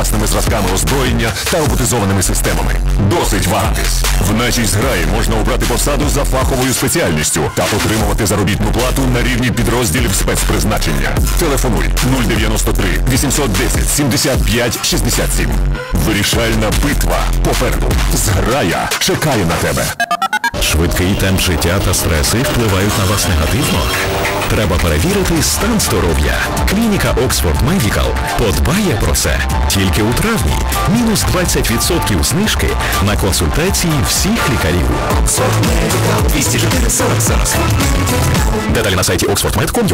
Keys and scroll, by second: 14.0 Page_Down.